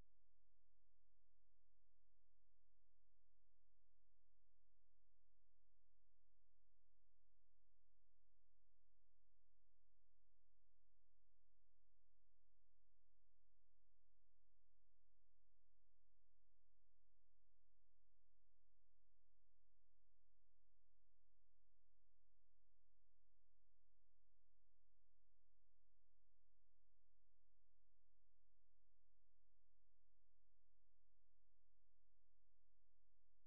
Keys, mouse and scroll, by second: 0.5 typing, 11.7 click.